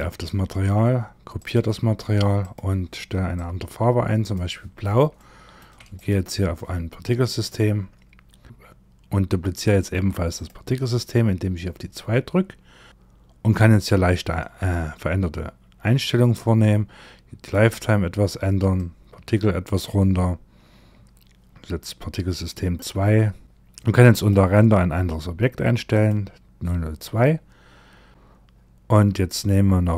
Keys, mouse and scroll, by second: 0.9 click, 1.9 click, 4.7 shift+middle click, 5.4 click, 8.4 click, 8.4-9.9 scroll up 10, 9.9 click, 12.3-15.8 scroll down 13, 15.8 click, 18.3 click, 22.2-23.4 scroll down 12, 23.4 click, 23.6 click, 27.5-29.9 scroll up 23.